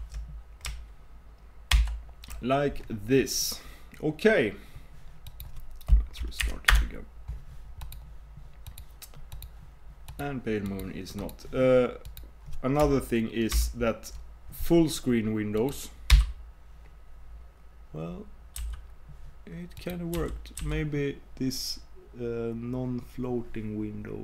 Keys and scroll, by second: 13.6 super+m, 18.6 super+m.